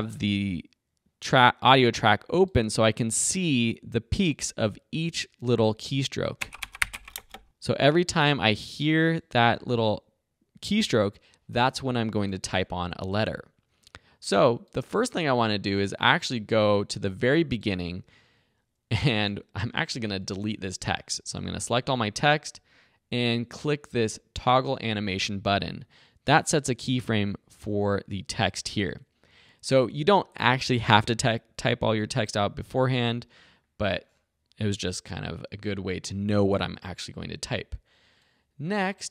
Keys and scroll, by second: 6.3 space, 21.2 super+a, 21.6 BackSpace.